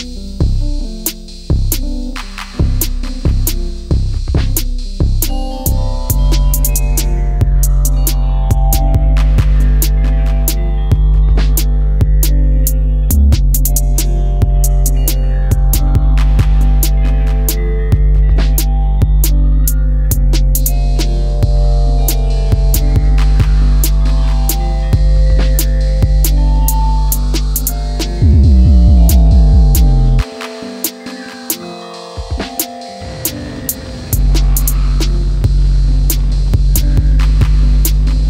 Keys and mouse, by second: 2.9-4.8 drag, 6.0 click, 6.2 click, 6.3 click, 6.7-7.9 drag, 8.2 click, 9.2 click, 11.9 click, 12.6 click, 14.0 click, 15.4 click, 16.4 click, 17.5 click, 19.4 click, 21.1 click, 25.2 shift+a, 30.1-32.3 drag, 33.6 click, 35.4 click, 36.5 click, 37.2-38.2 drag.